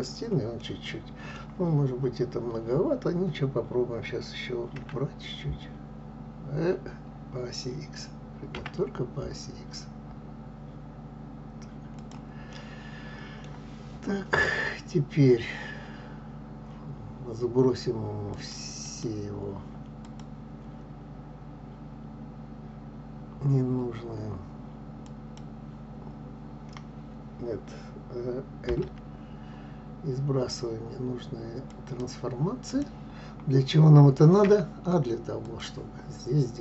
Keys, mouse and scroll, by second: 4.3 s, 12.2-13.2 middle drag, 13.2-16.2 scroll up 2, 18.5-19.5 drag, 24.9-28.0 drag, 28.0 l, 31.5 click, 32.9-34.9 scroll up 2, 34.9-36.6 drag.